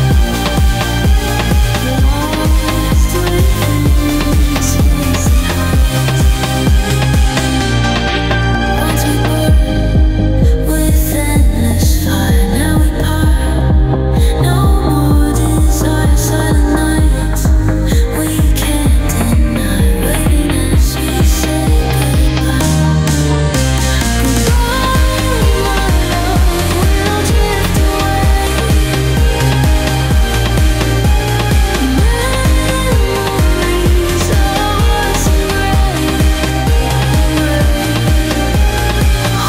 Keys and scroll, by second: 9.9 ctrl+g, 23.1 space, 28.7 ctrl+g.